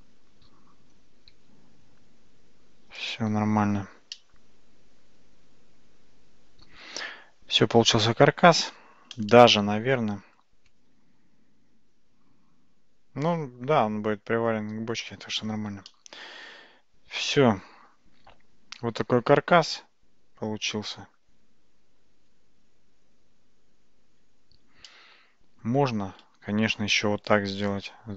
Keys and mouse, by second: 1.4 g, 4.2-8.6 middle drag, 9.4-10.4 shift+middle drag, 16.0-21.2 middle drag, 24.9-25.7 shift+middle drag, 26.8 shift+d.